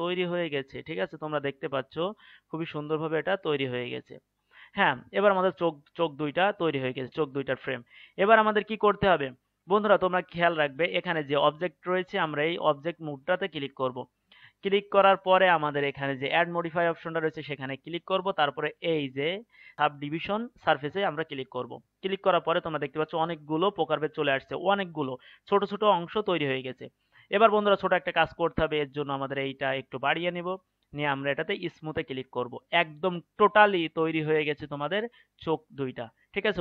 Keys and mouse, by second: 4.3-11.1 middle drag, 11.5 click, 16.4-18.3 drag, 22.8 middle click, 22.9-29.0 middle drag, 29.0-32.2 drag.